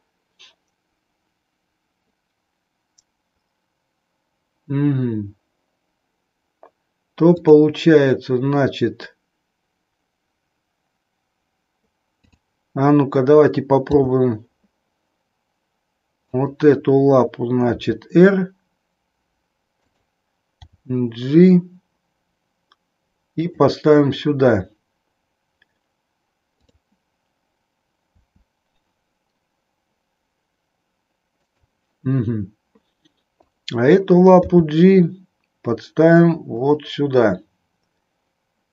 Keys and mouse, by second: 7.2 click, 12.1 click, 13.8 g, 17.8 r, 20.0 click, 20.6 g, 23.4 click, 26.4 click, 28.2 r, 31.4 click, 34.4 g.